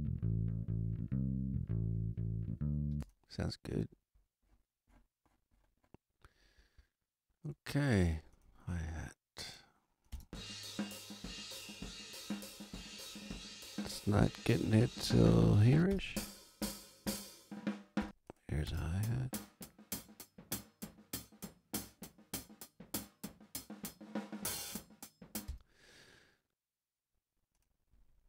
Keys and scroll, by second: 2.8 space, 10.0 space, 15.7 space, 18.0 space, 25.4 space.